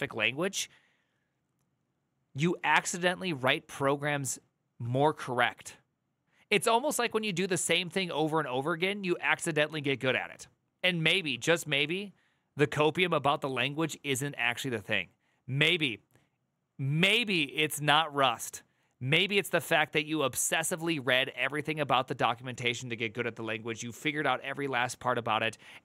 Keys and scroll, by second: 9.4 alt+[.